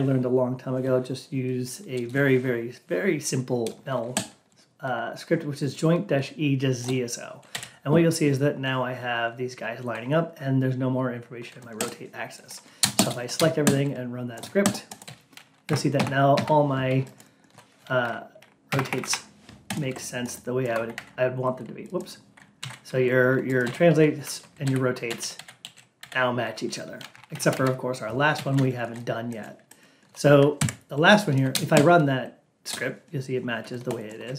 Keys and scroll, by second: 15.5 Down, 16.3 Down, 18.6 Up, 20.8 ctrl+q, 22.6 ctrl+a, 27.0 Down.